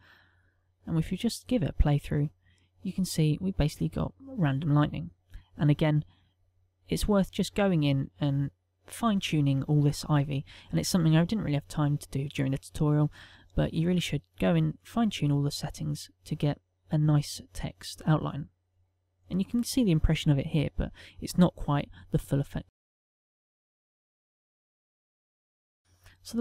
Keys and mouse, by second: 0.2 click, 1.2 click, 6.1 click, 19.1 click, 19.9 click, 24.6 click.